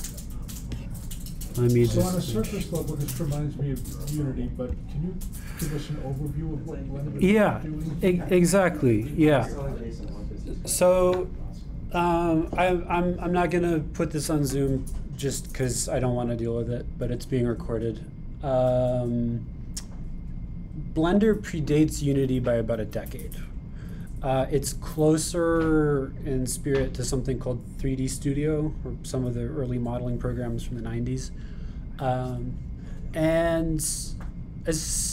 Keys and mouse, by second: 10.2 middle click.